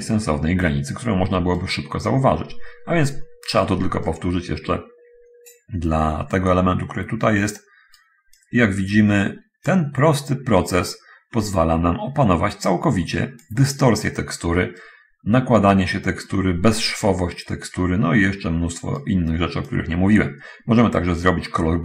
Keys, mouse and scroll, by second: 0.9 middle click, 1.9-3.9 right drag, 4.1-8.5 right drag, 10.5-13.9 drag, 15.1-19.3 right drag, 20.0-21.8 drag.